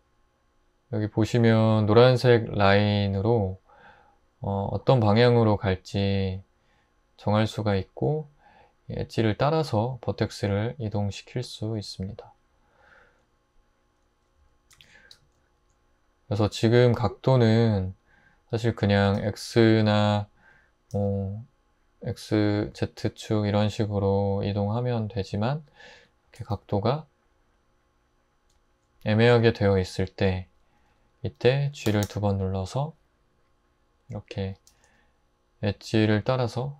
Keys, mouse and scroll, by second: 14.8 super+z, 15.1 Tab, 18.5 Tab, 19.2 typing, 21.0 x, 22.7 z, 24.5 Tab, 25.3 ⟲, 26.0 Tab, 26.3 typing, 29.3 Tab, 31.9 typing, 34.7 typing.